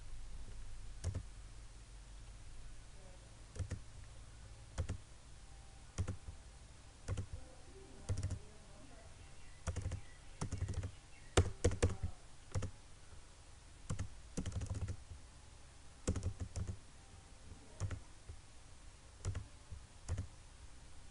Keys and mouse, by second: 3.7 click.